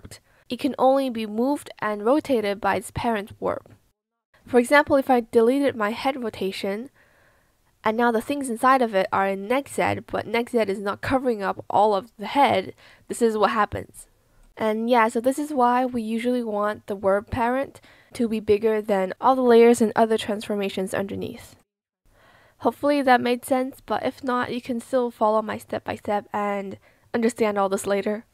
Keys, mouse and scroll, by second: 6.4 BackSpace, 12.6 ctrl+z, 14.4 ctrl+z, 16.3 ctrl+z, 22.6 ctrl+z, 26.0 ctrl+z.